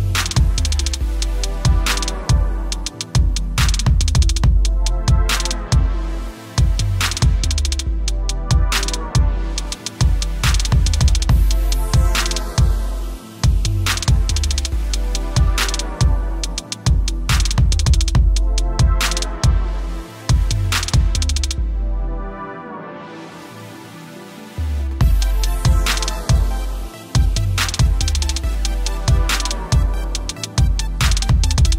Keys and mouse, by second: 1.0 Return, 1.9 v, 2.1 Up, 2.6 t, 2.8 click, 4.1 Return, 5.5 click, 6.2 Up, 6.9 ctrl+alt+click, 7.3 t, 7.6 click, 8.3 Return, 8.5 Up, 8.8 v, 9.1 Up, 10.2 space, 10.3 click, 10.4 space, 10.8 click, 11.1 t, 11.4 click, 12.6 click, 15.5 =, 15.6 click, 17.1 right click, 17.3 click, 18.4 Return, 19.3 alt+click, 19.7 t, 20.3 ctrl+t, 20.6 click, 21.1 Return, 21.2 =, 22.2 t, 22.5 click, 24.6 click, 25.7 Return, 26.3-27.9 typing, 26.8 click, 28.4 click, 30.2 click.